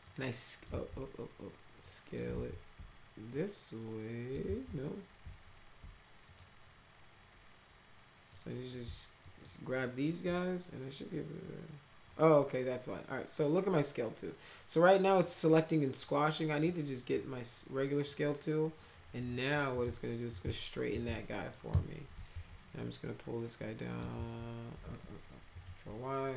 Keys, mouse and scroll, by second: 0.0 click, 0.6 ctrl+z, 1.8 click, 2.2 ctrl+z, 3.3 click, 4.4 ctrl+z, 6.2 click, 8.2 click, 9.2 ctrl+click, 9.8 ctrl+click, 15.2-16.6 drag, 18.0-21.5 drag, 22.3 w, 23.5 click, 24.1 ctrl+z, 25.4 ctrl+y.